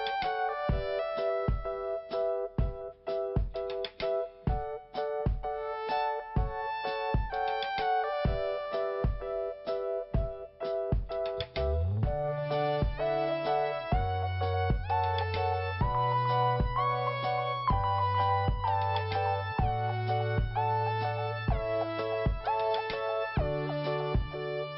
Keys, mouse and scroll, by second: 0.3 click, 0.4 click, 2.5 click, 2.6 click, 6.7 click, 6.8 click, 9.7 click, 9.9 click, 10.9 click, 10.9 click, 11.3 right click, 11.5 right click, 12.1 click, 13.8 p, 15.2 click, 17.4 click, 19.7 click, 22.5 l, 23.7 i, 23.9 click.